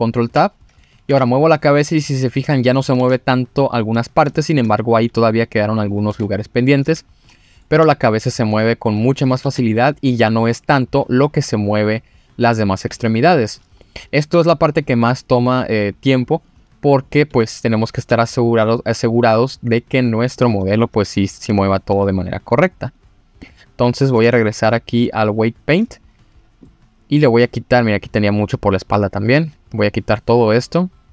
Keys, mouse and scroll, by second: 0.6 middle drag, 1.1 g, 2.6 click, 3.0 ctrl+z, 3.4 scroll up 2, 3.9 middle drag, 4.3 shift+middle drag, 4.9 g, 5.8 click, 6.1 ctrl+z, 6.3-6.6 scroll down 1, 6.6-7.0 middle drag, 7.3 middle drag, 7.8 g, 9.2 click, 9.4 ctrl+z, 10.5-12.4 middle drag, 13.8-14.2 middle drag, 14.3 Tab, 15.0 middle click, 16.4 click, 16.9 click, 17.3 Tab, 17.9 scroll down 2, 18.1 Tab, 18.5-18.9 scroll up 2, 18.9 click, 19.9-20.4 drag, 20.8 click, 21.2 click, 21.7 shift+click, 22.5 click, 22.8-23.3 drag, 23.4 click, 24.0 click, 25.0-25.8 drag, 26.1-26.9 scroll down 3, 26.6 middle click, 27.6 click.